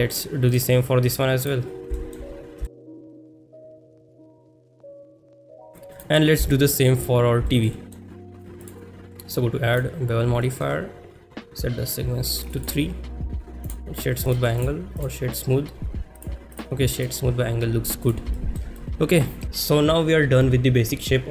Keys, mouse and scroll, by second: 0.0 shift+middle click, 0.5-1.5 drag, 2.0 shift+middle click, 2.7 shift+middle click, 3.0 click, 3.3 shift+middle click, 3.5-5.2 shift+drag, 5.7 ctrl+s, 6.0 click, 6.5-6.9 shift+middle drag, 7.5 shift+middle drag, 7.8 middle drag, 8.6-9.8 drag, 10.4 shift+middle drag, 12.6 click, 15.0-16.2 right drag, 16.6 right click, 18.0 click, 18.4 shift+middle click, 18.8-19.4 middle drag.